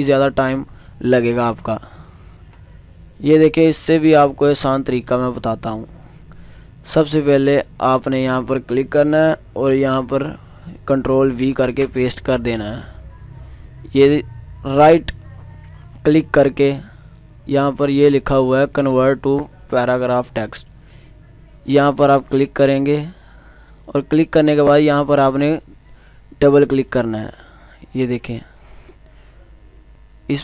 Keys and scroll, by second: 11.6 ctrl+v.